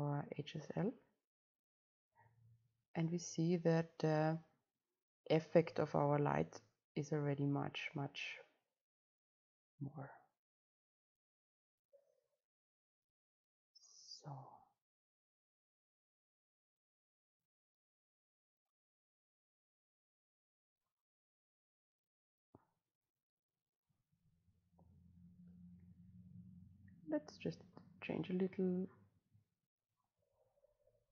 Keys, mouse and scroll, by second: 0.0-4.4 right drag, 5.2-8.1 right drag, 9.0-11.0 right drag, 11.0-13.1 drag, 13.1-14.7 right drag, 14.7 click, 17.2-19.2 drag, 19.2-21.0 right drag, 21.0-23.4 drag, 23.4-31.1 right drag.